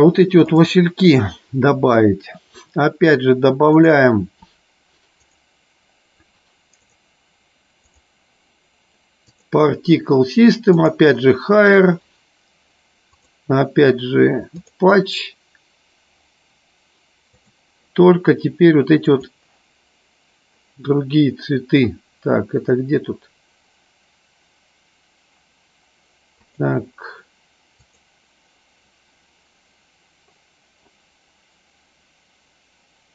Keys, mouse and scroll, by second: 3.8 click, 9.6 click, 10.8 click, 13.2-14.9 drag, 17.3 click, 26.6-28.2 drag.